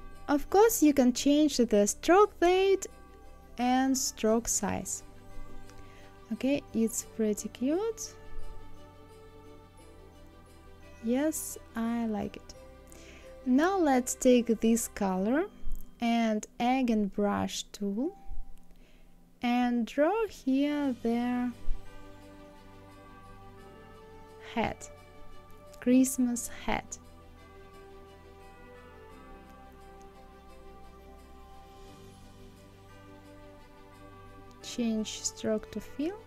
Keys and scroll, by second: 1.7 KP_0, 1.8 Return, 3.9 KP_0, 4.1 KP_7, 7.2 ctrl+z.